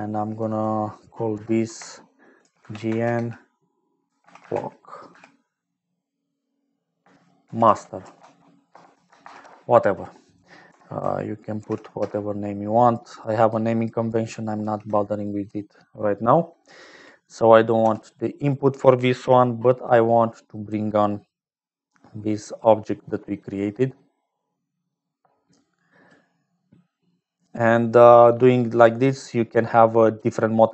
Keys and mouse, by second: 0.2 click, 1.3 F2, 10.6 F2, 13.4-14.5 drag, 14.5 ctrl+v, 20.5 click, 22.3-23.8 drag, 24.9-26.4 drag, 26.9 middle click, 28.2 click, 29.2 click, 30.6 middle click.